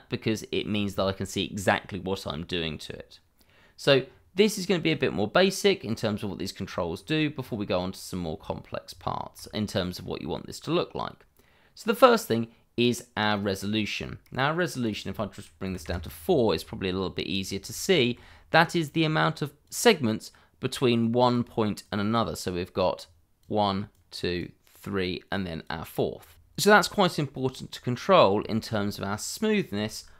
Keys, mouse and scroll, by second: 3.1 scroll up 1, 7.4 scroll up 1, 9.0 shift+middle click, 13.7-14.0 scroll up 1, 14.0 middle click, 14.8 click, 15.6 4, 15.8 Return, 17.2 scroll up 1, 17.8 shift+middle click, 19.6 click, 21.0 click, 24.4 double click, 25.3 click, 26.3 Return, 26.7 scroll down 1, 27.9 middle click, 28.4 shift+middle click, 29.5 click.